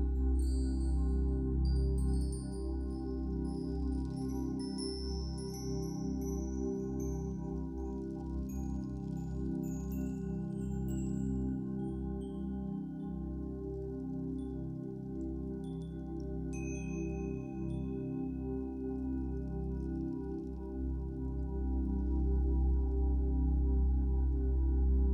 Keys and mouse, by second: 0.2 click, 0.7 click, 1.2 click, 1.5 click, 2.1 click, 3.7 click, 4.7 alt+shift+click, 5.9 ctrl+alt+click, 8.2-12.4 alt+drag, 12.5-15.7 drag, 15.7 g, 16.1 z, 17.2-18.3 drag, 18.3 g, 18.6 z, 20.4-21.9 shift+drag, 20.4 typing, 21.9-22.6 typing.